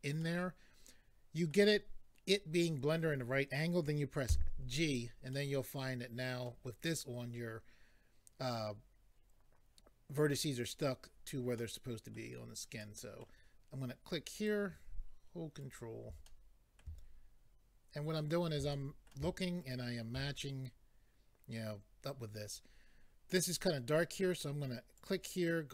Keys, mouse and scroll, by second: 0.2 middle click, 4.8 click, 5.3 middle click, 11.6 middle click, 12.8 middle click, 14.3 click, 15.6 ctrl+right click, 16.3 middle click, 18.2 ctrl+right click, 18.7 middle click, 19.6 ctrl+right click, 25.0 click.